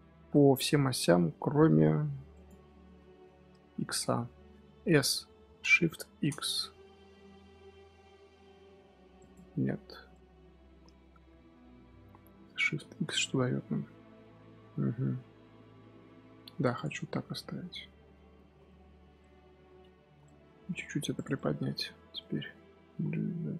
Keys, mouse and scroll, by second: 1.5 s, 2.5 scroll down 2, 2.8 scroll up 1, 2.9 scroll down 1, 3.0-3.6 scroll up 1, 3.6-4.8 scroll up 10, 4.8 s, 10.0-12.0 middle drag, 12.0 scroll down 1, 12.2 s, 16.9 middle click, 17.6-18.0 scroll down 3, 18.0-18.4 middle drag, 18.4 z, 18.6-18.9 middle drag, 18.9 z, 19.1-20.0 middle drag, 20.0 scroll up 3, 20.3 Tab, 21.1 click, 21.3 middle click, 21.8 scroll up 2, 22.1 middle click, 22.7 g.